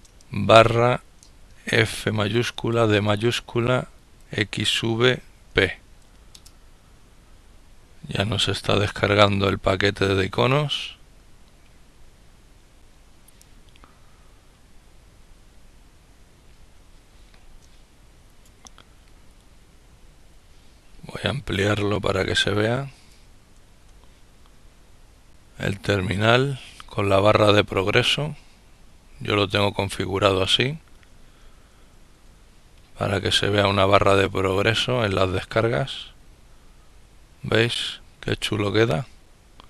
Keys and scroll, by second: 0.0-2.2 typing, 3.8-6.0 typing.